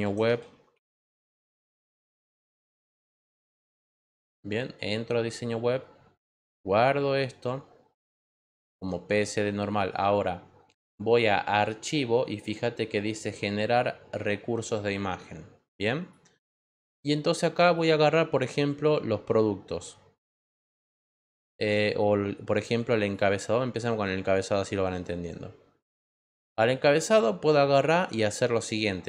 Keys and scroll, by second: 0.0-2.4 typing.